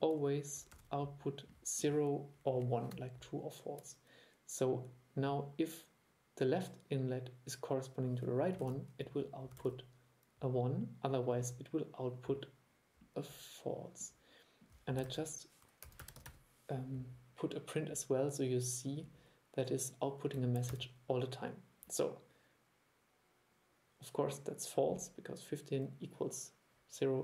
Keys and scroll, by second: 0.8 super+3, 8.7 super+3, 9.7 super+3, 15.1 super+1, 20.8 super+e.